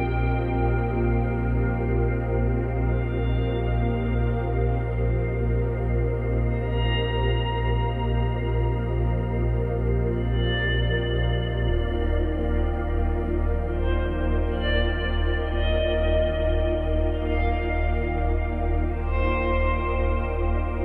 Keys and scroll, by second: 10.1 space, 13.0 space.